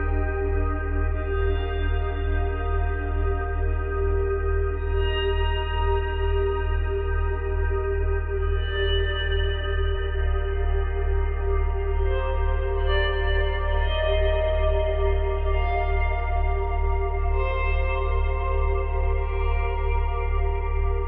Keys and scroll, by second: 10.9 space, 18.1 space, 19.9 space.